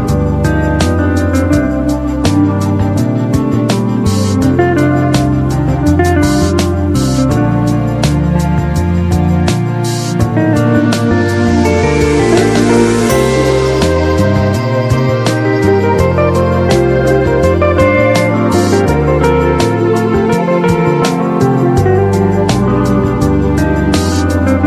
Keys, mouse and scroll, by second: 13.4-14.6 typing, 13.6-14.0 click, 14.3-14.9 click, 16.0-20.3 drag.